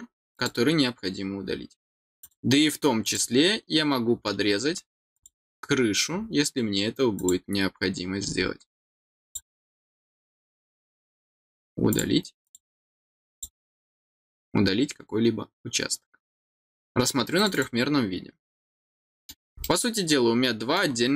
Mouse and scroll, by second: 0.3 click, 2.1 click, 3.0 click, 5.1 click, 7.1 click, 9.2 click, 11.8 click, 12.4 click, 13.3 click, 14.2 middle click, 17.3 click, 17.5 click, 18.2 middle click, 19.6-20.7 middle drag.